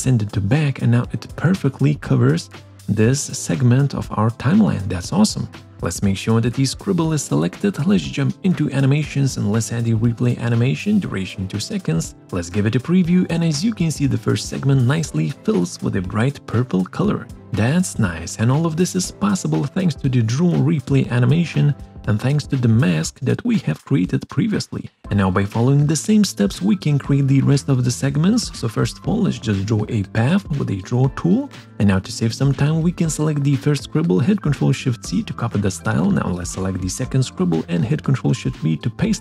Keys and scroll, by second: 34.2 ctrl+shift+c, 36.7 ctrl+shift+v.